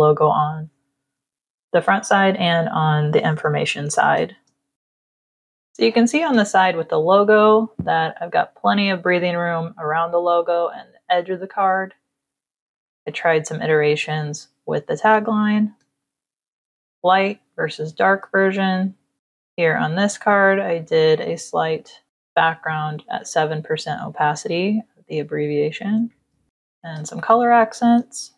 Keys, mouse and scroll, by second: 1.1 space, 1.3 click, 3.3 ctrl+-, 4.4 space, 4.7 click, 12.8 click, 13.7 click, 14.6 click, 15.6 space, 15.7 click, 17.9 space, 18.1 click, 19.2 z, 19.4 click, 20.1 v, 20.9 click, 21.6 click, 22.0 click, 24.2 ctrl+-, 24.9 ctrl+-, 26.1 space, 26.5 click, 27.7 space, 28.0 click.